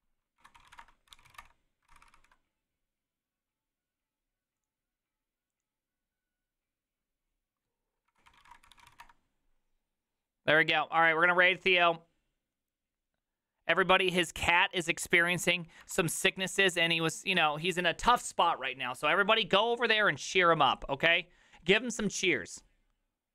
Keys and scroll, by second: 0.1-2.6 typing, 8.8 typing, 9.0 Return, 16.4 alt+r, 16.4 Right, 16.6 Right.